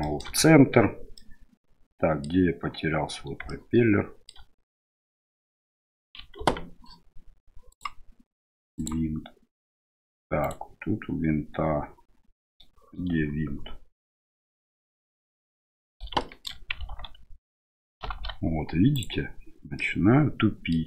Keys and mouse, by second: 0.0 shift+middle click, 1.2-2.3 middle drag, 3.5 shift+middle click, 5.5 right click, 6.4 ctrl+z, 7.8 click, 8.8 click, 10.4 right click, 14.2 KP_Decimal, 16.2 shift+middle click, 18.0 alt+h, 18.9 right click, 19.8 middle click.